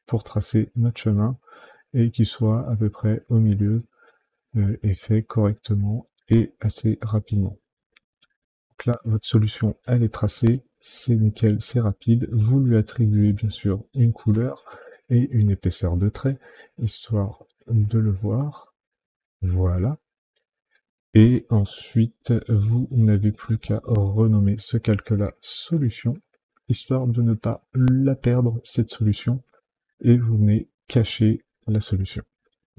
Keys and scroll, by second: 25.6-27.6 typing, 28.1 Return.